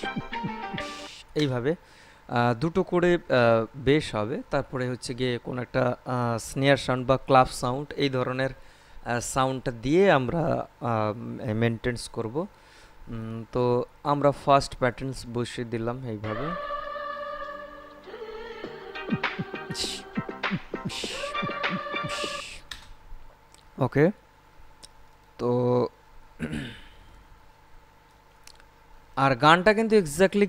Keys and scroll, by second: 1.2 space, 16.5 space, 22.6 space.